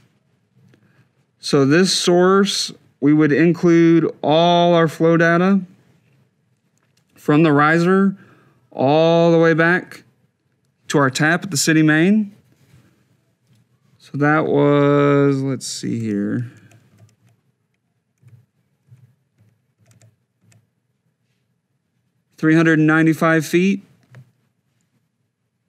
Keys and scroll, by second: 15.8 Left, 18.0 Right, 19.5 Left.